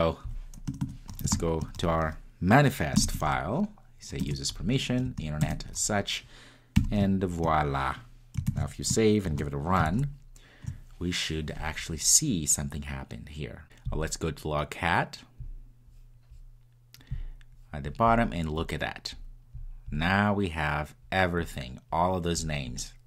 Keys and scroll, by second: 4.3 Return, 8.5 Return, 9.2 super+s.